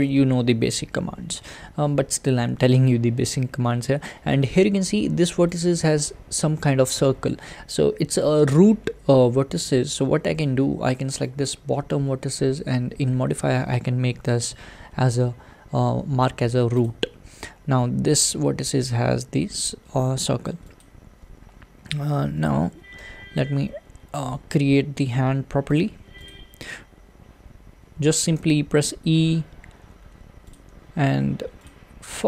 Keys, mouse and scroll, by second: 0.1 click, 5.6 click, 11.5 click, 16.8-20.8 drag, 22.7 a, 23.1 g, 26.3 click, 28.4 e, 30.7 e.